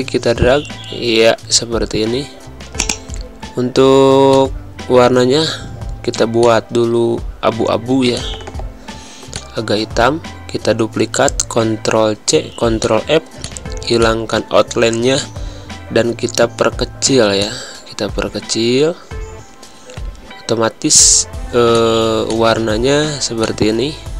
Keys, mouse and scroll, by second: 10.5 ctrl+c, 12.8 click, 14.8 z, 15.1 click, 16.1 v, 17.4 alt+shift+click, 22.1 space, 22.3 click, 22.5 space, 23.4 click.